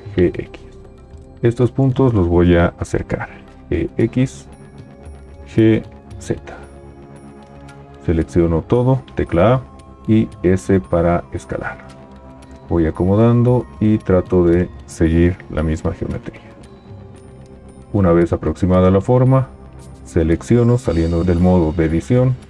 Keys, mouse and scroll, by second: 0.1 g, 0.1 x, 3.6 g, 3.6 x, 5.4 g, 5.4 z, 9.3 a, 10.4 s, 12.6 g, 21.2 Tab.